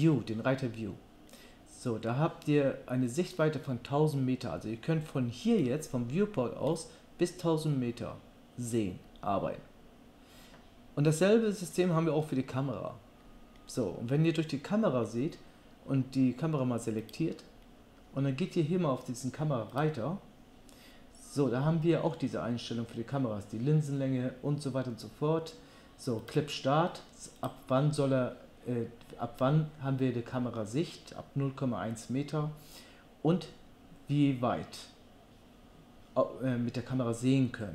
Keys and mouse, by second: 17.0 click, 17.9-19.7 middle drag, 19.7 click, 19.9-26.3 middle drag, 26.3-27.5 drag, 27.5-37.7 middle drag.